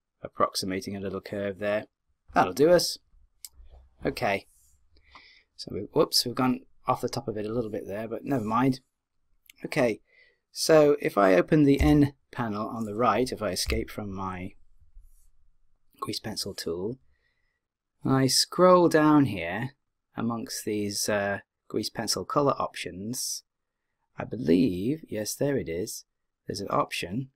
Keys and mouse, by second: 13.6 n, 18.2-19.9 drag, 22.9 click.